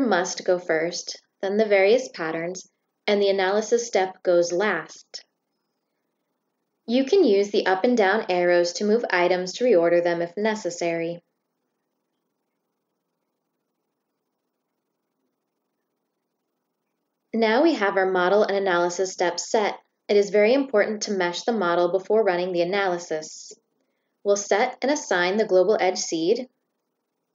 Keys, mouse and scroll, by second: 14.8 click, 20.4 click, 22.5 click, 24.2 click, 25.8 click.